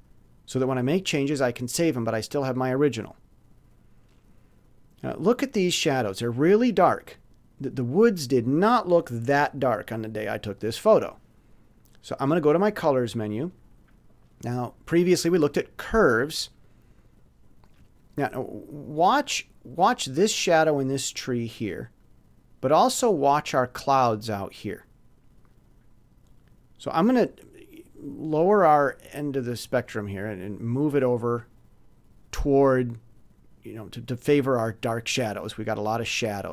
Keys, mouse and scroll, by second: 12.6 click, 16.6 click, 22.0-22.9 scroll up 2, 27.7-32.6 drag.